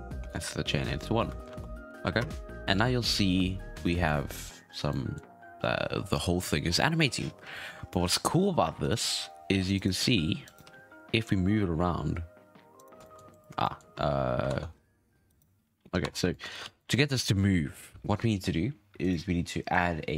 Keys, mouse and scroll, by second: 0.3-0.7 scroll up 3, 0.7 scroll down 4, 1.4 shift+Left, 1.9 alt+a, 2.1 space, 2.9 scroll down 2, 3.1-4.8 middle drag, 4.8 scroll up 1, 4.9-7.3 middle drag, 7.3-7.9 scroll down 3, 7.9-8.3 shift+middle drag, 8.3-8.8 scroll down 1, 8.8 right click, 9.0 g, 10.5 right click, 10.6 g, 13.0 shift+middle drag, 13.2 scroll up 1, 13.6 shift+middle drag, 13.9 space, 14.0-14.4 scroll up 5, 14.4 ctrl+Tab, 14.7-15.2 scroll up 4, 15.2 right click, 15.8 scroll down 4, 16.0 Tab, 16.3 shift+middle click, 16.4 scroll up 6, 16.6 alt+a, 16.7 click, 19.0 click.